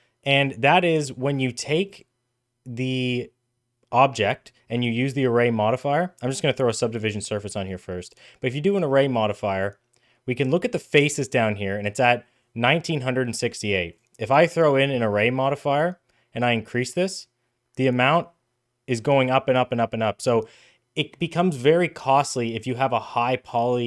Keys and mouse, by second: 1.2 right click, 4.9 click, 7.6-9.6 drag, 13.8-14.5 drag, 16.8-22.2 drag.